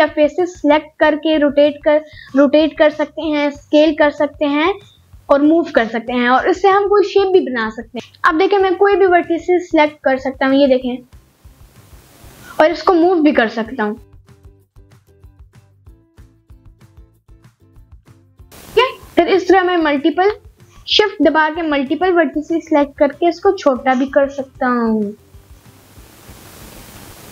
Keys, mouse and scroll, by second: 1.2 scroll up 1, 1.5-2.0 scroll down 1, 2.0-3.6 scroll down 1, 3.6 click, 4.3 click, 5.2 click, 7.3 click, 8.0 click, 8.0 g, 9.1 click, 10.0 middle click, 10.8 click, 11.1 g, 11.8 click, 12.1 middle click, 14.6 shift+click, 17.8 s, 19.0 click, 19.4 scroll up 1, 19.6 middle click, 20.2 scroll up 1, 20.4 middle click, 21.0 scroll up 2, 21.3 middle click, 21.8 scroll down 1, 22.0 middle click, 24.5-26.5 middle drag, 26.8 middle click.